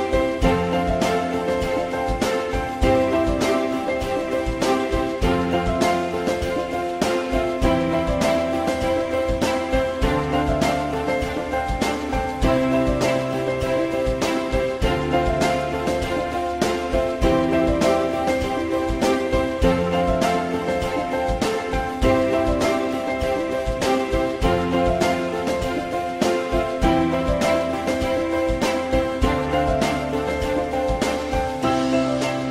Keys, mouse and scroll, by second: 0.3 alt+middle click, 7.1 alt+middle click, 9.2 ctrl+click, 10.5 ctrl+BackSpace, 14.6 alt+middle click, 15.8 alt+middle click, 25.0 alt+middle click, 29.0 alt+middle click.